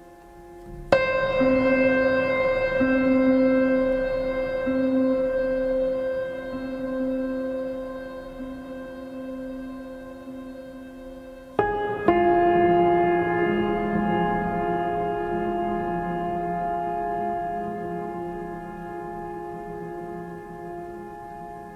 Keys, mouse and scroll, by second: 0.1 space, 0.2 right click, 0.4 click, 0.7 space, 1.2-1.8 ctrl+click, 1.9 right click, 2.1 click, 2.5 v, 5.5 click, 7.1 space, 7.5-8.2 ctrl+click, 8.6 alt+scroll up 1, 9.3 click, 13.4 space, 13.7-14.3 ctrl+drag.